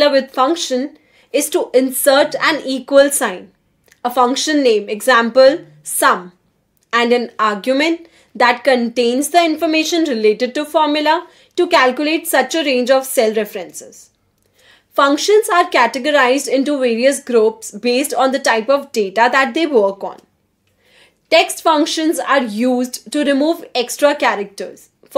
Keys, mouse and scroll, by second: 0.5-5.4 typing, 6.8 shift+9, 9.3-12.9 typing, 13.6 Return, 16.1 click, 17.0 click, 19.7 click, 20.9 click, 22.1 =, 23.7-25.0 typing.